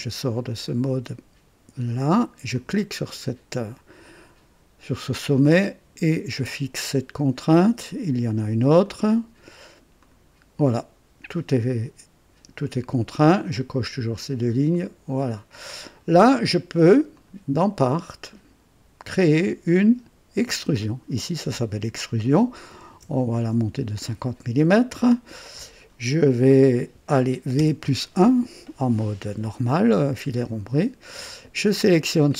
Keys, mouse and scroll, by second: 2.5 click, 5.3 click, 8.8 click, 10.0 click, 14.7 click, 17.1 click, 18.2 click, 20.4 click, 22.7 KP_5, 23.0 KP_0, 23.4 KP_Enter, 25.4 click, 27.5 v, 27.8 KP_1, 29.9-31.3 drag, 32.0 click.